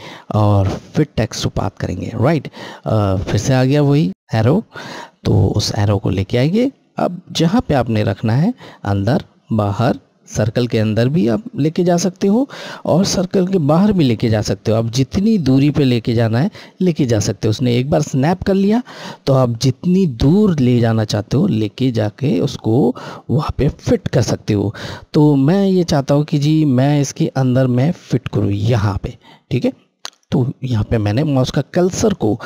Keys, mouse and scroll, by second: 1.7 click, 30.0 click.